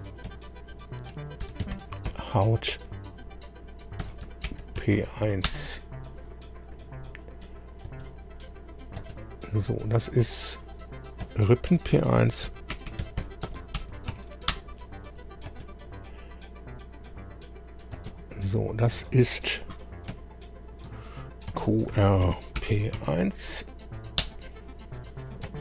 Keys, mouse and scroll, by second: 0.2 F2, 1.2-2.6 typing, 3.8-5.3 typing, 5.4 Return, 7.8 space, 8.4 click, 9.0 space, 10.5 click, 11.2 F2, 11.9-15.5 typing, 15.8 click, 17.9 space, 20.1 F2, 21.2-23.4 typing, 24.2 Return, 25.4 space.